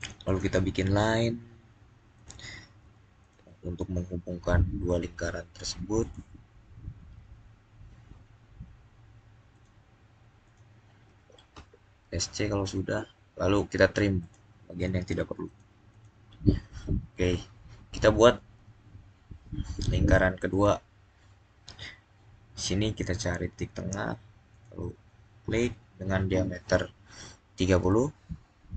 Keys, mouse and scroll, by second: 0.1 click, 5.8 click, 9.4 click, 14.1 click, 14.7 click, 20.4 click, 24.4 click, 27.4-28.2 typing, 27.5 click.